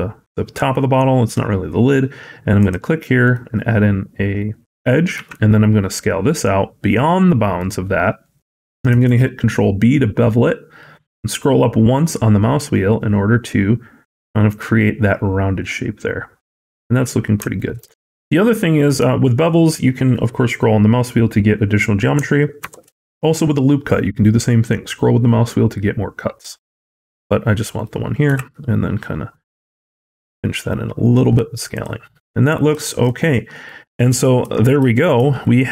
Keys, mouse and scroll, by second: 5.0 s, 8.8 ctrl+b, 16.5-17.3 scroll down 2, 17.4 shift+middle click, 17.8-18.1 scroll down 4, 18.1-21.7 scroll up 6, 22.5 ctrl+r, 28.1 s, 31.9-32.6 scroll down 8, 32.7 shift+middle click, 33.2 middle click, 34.3 Tab, 35.0 alt+z, 35.5 scroll up 1.